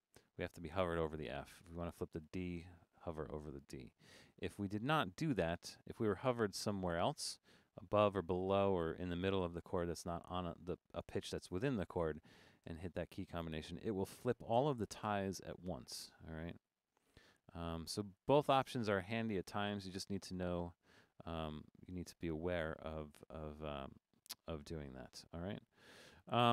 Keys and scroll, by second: 1.2 Down, 1.6 Down, 2.6 super+f, 4.0 super+f, 4.4 Up, 4.6 Up, 5.0 super+f, 5.3 Up, 5.4 Up, 5.6 Up, 5.8 Up, 6.0 Up, 6.1 Up, 12.7 super+f, 16.0 super+f, 16.7 Down, 16.8 Down, 16.9 Down, 17.1 Down, 17.3 Down, 17.7 Down, 18.2 super+f, 18.8 Down, 18.8 Down, 19.2 super+f, 20.3 super+f, 21.4 super+f.